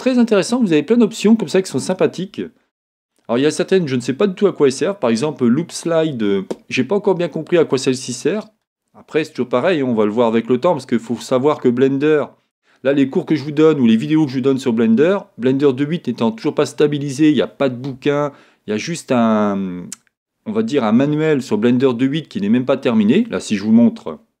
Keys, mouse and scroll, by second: 7.7-24.4 middle drag.